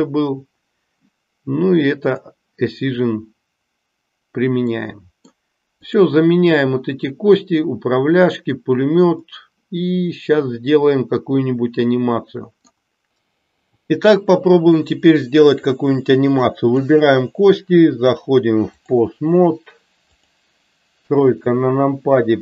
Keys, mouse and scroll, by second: 1.9 click, 4.7 middle click, 5.8 click, 9.2-12.8 middle drag, 16.5 click, 18.0-18.7 drag, 20.0 click.